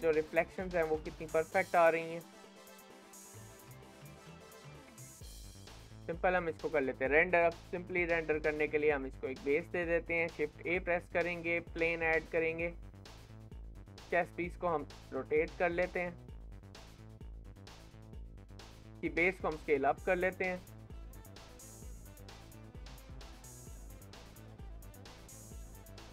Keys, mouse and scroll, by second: 0.2-0.8 scroll up 1, 0.8-2.1 shift+middle drag, 2.1 scroll down 3, 2.5-4.7 middle drag, 4.7 KP_7, 5.1-5.5 scroll up 1, 5.5-6.6 shift+middle drag, 6.6-8.7 scroll up 1, 12.8 scroll down 3, 13.4 click, 13.7 middle click, 14.4 r, 18.1 middle click, 18.5 click, 18.8 middle click, 19.1 s, 20.8-21.3 scroll down 7, 21.3 middle click, 21.9 s, 23.5 middle click, 23.7-24.1 scroll up 3, 24.1 shift+middle click, 24.8-25.2 scroll up 2, 25.2-26.1 shift+middle drag.